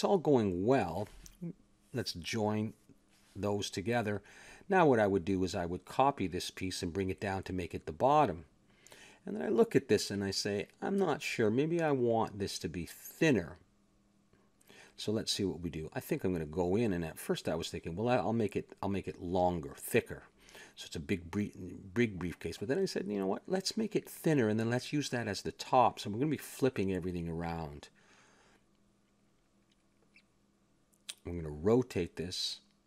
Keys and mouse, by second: 0.8 click, 2.3-3.5 drag, 3.3 ctrl+j, 4.2 KP_1, 5.4 shift+d, 5.8 r, 7.3 click, 9.8 middle click, 10.7 click, 12.4 a, 12.4-13.5 middle drag, 14.3 KP_1, 14.7-15.9 middle drag, 15.9 click, 18.3 Tab, 19.8 z, 20.5 middle click, 21.2 ctrl+Tab, 22.2 b, 24.6 click, 26.6 a, 26.9 Tab, 27.7 z, 28.7 a, 29.4 a.